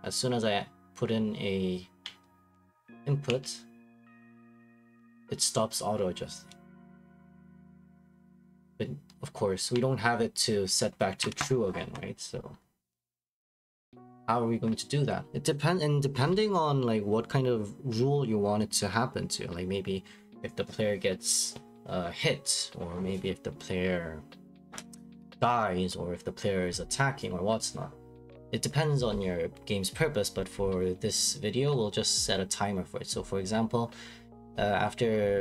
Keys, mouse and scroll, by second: 11.2 Escape, 13.2 click, 13.7-15.3 scroll down 2, 30.0-31.2 scroll down 3, 31.2-31.7 scroll up 4, 31.7-32.1 scroll down 2, 32.1-33.3 scroll.